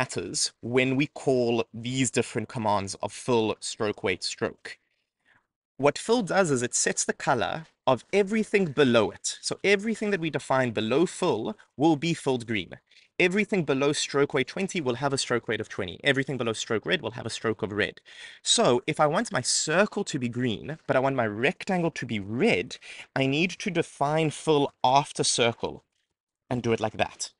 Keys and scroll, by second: 22.7 Return.